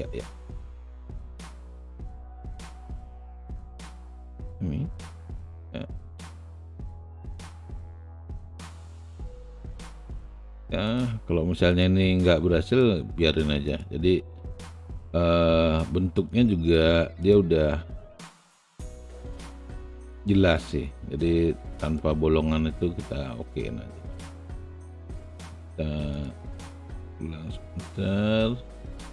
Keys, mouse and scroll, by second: 1.1 alt+middle click, 1.7 alt+click, 2.5 alt+middle click, 6.4 shift+click, 7.6-8.6 shift+drag, 15.1 shift+click, 26.1 shift+click, 27.0 shift+click, 27.8-29.1 shift+drag.